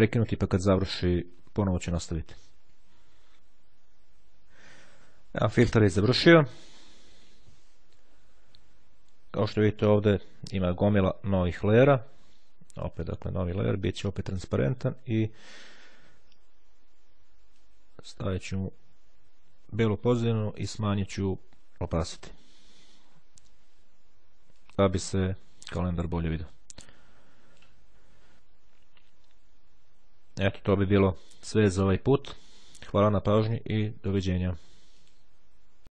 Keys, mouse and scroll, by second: 9.5-11.3 scroll up 1, 12.3 click, 13.1 click, 14.9 click, 17.6-19.1 drag, 20.6-22.1 drag, 24.1-28.2 drag.